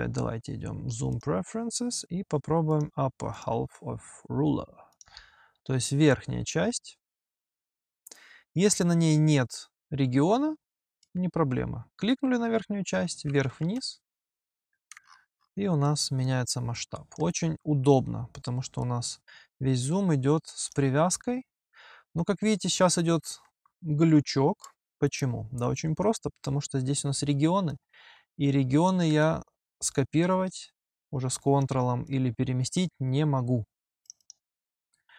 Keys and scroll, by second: 22.0 h, 28.9 h.